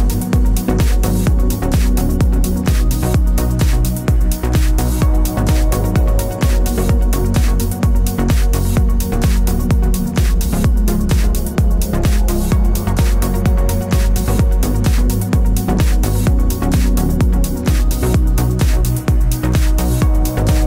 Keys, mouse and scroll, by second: 0.4 g, 2.4 click, 2.6 g, 6.3 Tab, 9.0-15.7 drag, 12.1 Tab, 16.4 Tab.